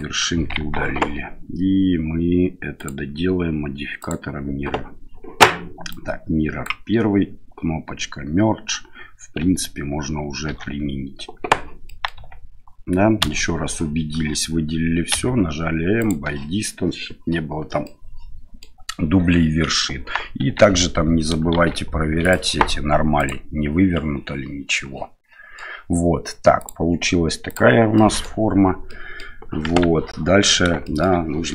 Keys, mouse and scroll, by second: 0.6 Tab, 2.8-4.1 drag, 5.9-6.6 drag, 10.5 ctrl+a, 11.8 middle drag, 12.1 Tab, 13.2 a, 15.1 m, 17.8 middle click, 20.4 Tab, 21.5 shift+z, 22.3-23.6 drag, 24.7-25.5 middle drag, 26.6-27.7 drag, 27.9 middle drag, 28.8-29.2 middle drag, 29.6 KP_1, 30.8 shift+middle drag.